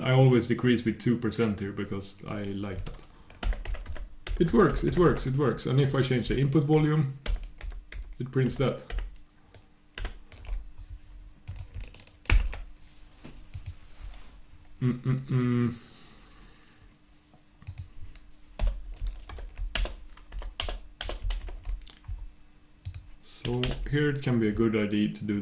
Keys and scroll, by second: 3.4 super+\, 4.2 super+', 4.7 super+\.